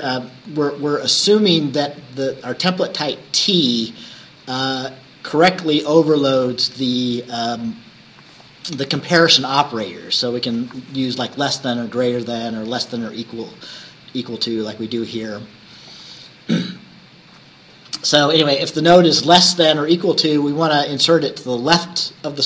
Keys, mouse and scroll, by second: 0.0-0.3 scroll up 1, 0.5 scroll up 1, 3.1-3.4 scroll down 1, 14.2 scroll down 1.